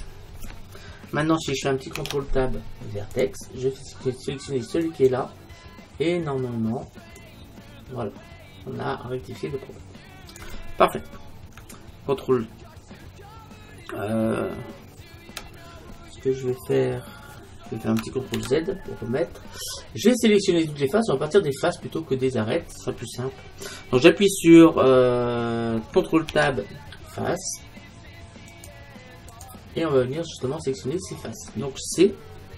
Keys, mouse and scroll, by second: 0.0 f, 2.0 ctrl+Tab, 4.9-6.7 right drag, 7.2-10.4 drag, 18.4 ctrl+z, 19.8 middle click, 20.4 middle click, 21.6-24.1 middle drag, 26.3 ctrl+Tab, 30.0-31.9 middle drag.